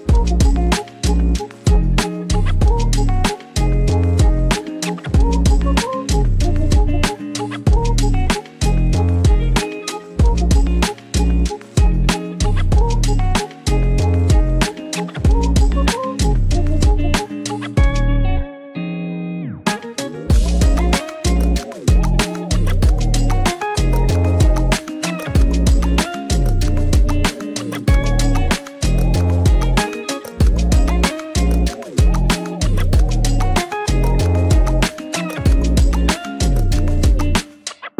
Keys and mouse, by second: 0.9 s, 2.3 click, 2.7 g, 3.0 y, 3.6 x, 4.5 click, 5.0 click, 5.0 right click, 6.5 s, 7.0 click, 7.5 r, 9.2 g, 9.9 x, 11.3 click, 12.4 shift+middle click, 13.1 shift+middle click, 13.8 click, 14.3 shift+middle click, 15.4 e, 17.1 click, 17.8 middle click, 18.9 click, 19.4 shift+middle click, 21.8 click, 22.5 r, 23.7 g, 24.7 click, 25.3 shift+middle click, 25.9 e, 28.3 click, 28.8 r, 30.3 click, 31.7 e, 32.8 click, 33.6 click, 35.9 shift+click.